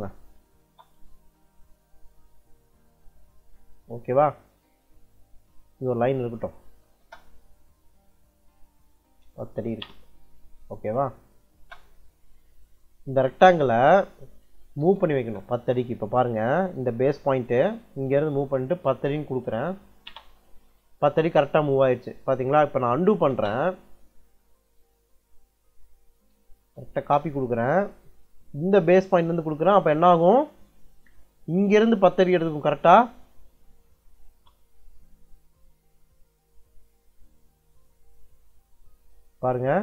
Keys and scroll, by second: 0.0-0.5 typing, 6.5 c, 6.9 space, 8.7-9.9 typing, 11.4 space, 14.7 m, 15.0 space, 18.5-19.8 typing, 19.9 Return, 22.9 u, 23.2 space, 26.2 c, 26.8 space, 31.4-32.8 typing, 34.1 Return.